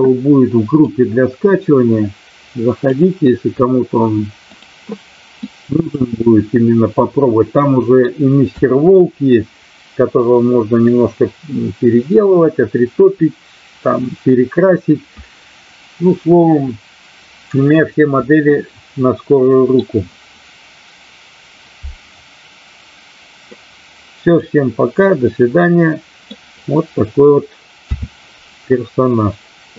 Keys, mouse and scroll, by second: 0.9-2.9 drag, 5.5-7.9 middle drag, 8.5 KP_1, 18.5-19.7 middle drag, 23.7 click, 25.2-26.2 middle drag, 27.8 a.